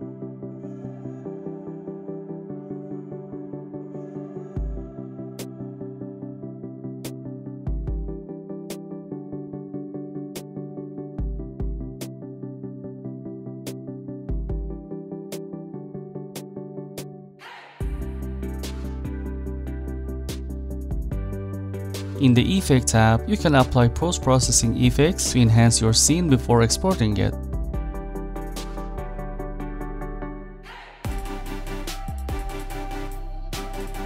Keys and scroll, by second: 13.3 0, 13.6 1, 13.7 Return, 18.3-19.7 typing.